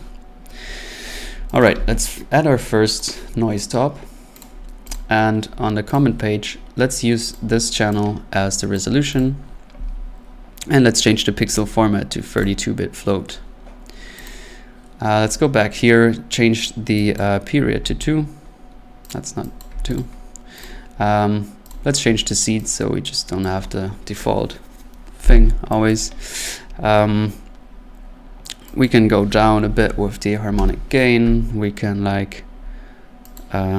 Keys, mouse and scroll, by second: 1.6 click, 1.7 click, 1.8 n, 3.0 click, 4.4 click, 4.9 click, 5.9 click, 7.3 click, 8.8 click, 9.2 click, 11.6 click, 12.4 click, 14.3 click, 15.2 scroll, 17.2 click, 17.8 3, 19.1 click, 19.6 click, 19.7 2, 20.0 click, 20.6 click, 21.7 click, 23.4 click, 25.9 click, 28.8 click, 29.6-30.5 typing, 30.5 Return, 33.4 click.